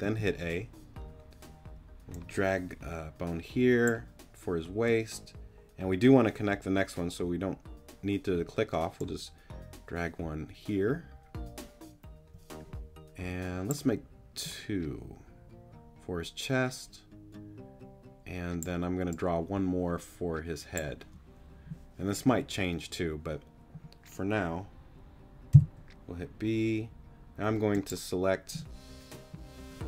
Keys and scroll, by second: 0.0 a, 25.5 b.